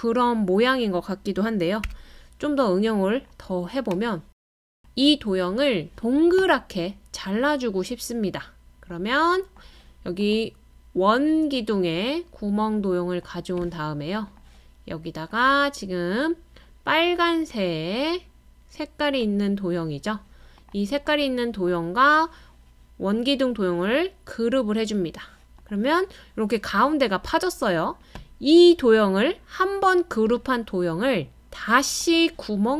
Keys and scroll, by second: 1.8 d.